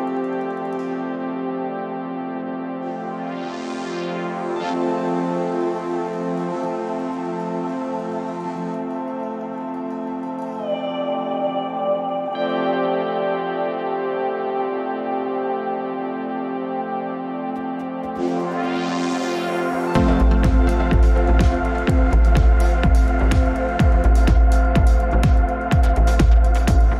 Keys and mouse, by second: 9.0 click.